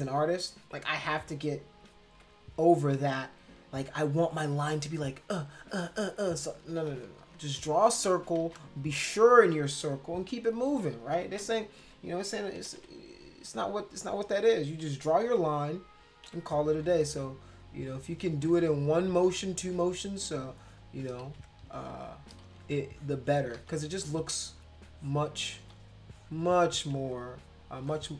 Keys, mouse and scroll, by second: 2.1 ], 3.9 click, 4.6 click, 5.1 click, 5.6 click, 5.8 click, 6.2 click, 6.4 click, 6.7 ctrl+z, 6.9 ctrl+z, 7.1 ctrl+z, 7.4 ctrl+z, 7.7 ctrl+z, 8.4 ctrl+z, 11.2 ctrl+z, 12.5 [, 12.8 [, 13.4 click, 13.8 click, 15.3 ], 16.2 ], 16.9 click, 17.8 click, 18.3 ctrl+z, 18.5 ctrl+z, 19.2 ctrl+z, 19.8 click, 20.4 click, 21.2 ctrl+z, 21.6 click, 22.4 ctrl+z, 22.9 click, 23.6 ctrl+z, 23.9 click, 24.9 click, 25.6 ctrl+z, 26.0 click, 27.8 space, 27.9 click.